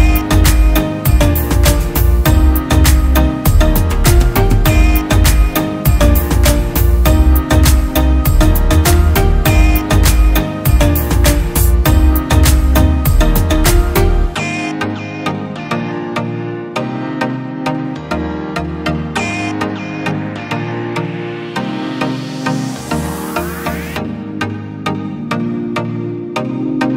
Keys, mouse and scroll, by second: 0.0-0.9 scroll up 1, 3.1-3.4 scroll up 1, 4.1 space, 5.5 alt+scroll down 1, 15.2 double click, 16.8-17.2 typing, 18.0 double click, 22.3 double click, 26.2 double click.